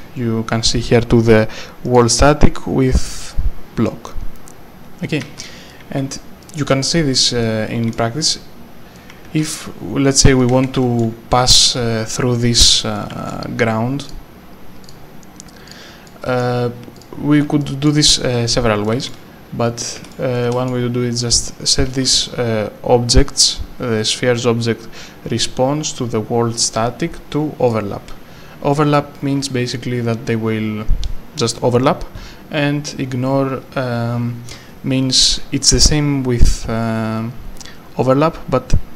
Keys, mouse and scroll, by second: 1.9 click, 5.2 a, 5.7 right click, 5.8 a, 6.4 right click, 7.7 a, 8.9 right click, 9.1 a, 10.1 w, 10.4 right click, 10.5 a, 12.9 right click, 13.3 q, 14.0 click, 16.1 right click, 16.4 s, 16.9 s, 17.1 click, 17.9 right click, 19.1 a, 19.6 right click, 20.0 e, 20.3 right click, 20.7 e, 21.7 right click, 22.2 w, 27.7 click.